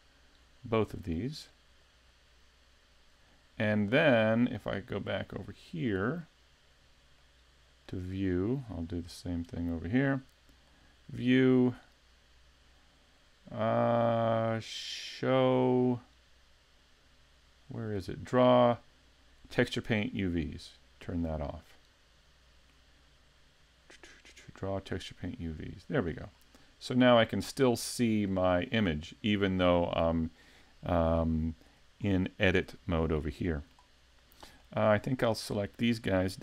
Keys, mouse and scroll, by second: 0.0 middle click, 2.1 click, 4.5 middle click, 7.2 middle click, 8.9 middle click, 10.7 click, 22.0 click, 26.3 scroll up 1, 26.4 middle click, 27.8-28.3 scroll down 1, 28.3 middle click, 28.9-29.5 scroll up 1, 32.0 shift+middle click, 33.2 shift+scroll up 1, 33.4 shift+middle click, 34.6 shift+middle click, 35.0 scroll up 2, 35.4 shift+middle click, 36.1-36.4 scroll up 2.